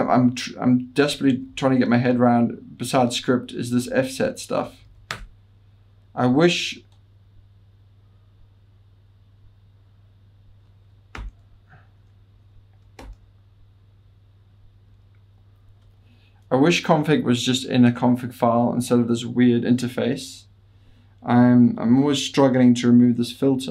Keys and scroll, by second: 4.9 Return, 4.9 typing, 5.1 Return, 11.2 typing, 13.0 super+8, 14.5 super+7, 14.9 super+9.